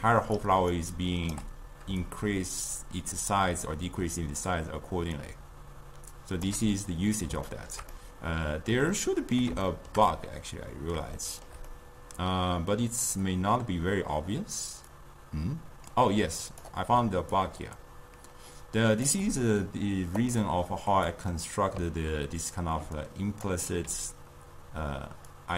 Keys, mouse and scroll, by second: 0.5 d, 0.8 right click, 1.5 d, 2.1-5.2 shift+drag, 7.7-14.8 shift+middle drag, 15.0-17.0 drag, 17.0 d, 17.5-19.2 drag, 19.2 d, 19.4 d, 20.3 click, 21.2-22.9 middle drag, 22.9 d, 23.1 click, 23.5 d, 25.4 click.